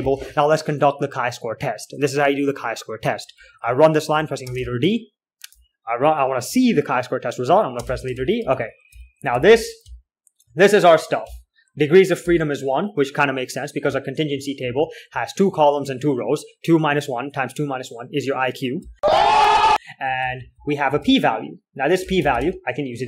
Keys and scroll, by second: 0.0-0.5 typing, 4.9 space, 4.9 d, 8.1-12.5 typing, 14.4-16.5 typing, 19.7-23.0 typing.